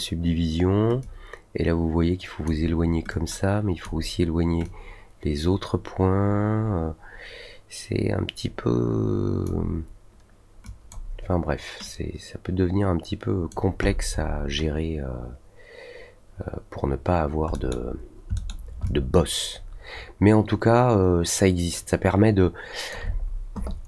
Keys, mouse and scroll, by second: 1.0-2.4 drag, 3.0 click, 4.6-9.4 drag, 10.6 click, 11.8 click, 13.8 middle click, 14.1 middle click, 17.5 middle click, 18.3 middle click, 18.8-22.8 alt+drag.